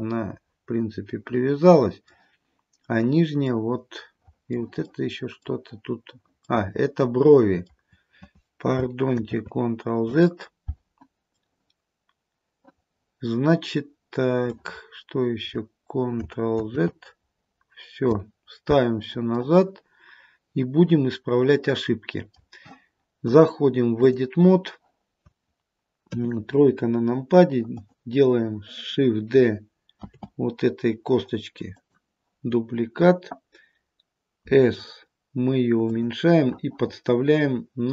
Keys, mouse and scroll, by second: 0.1 middle click, 3.6 middle click, 5.0 middle click, 9.3 ctrl+z, 11.4 middle click, 14.4 middle click, 14.9-15.4 scroll up 1, 16.7 ctrl+z, 19.5 middle click, 21.6 middle click, 23.4 click, 26.2 KP_3, 26.9-27.8 scroll down 1, 27.8 click, 30.1 shift+d, 34.5 s.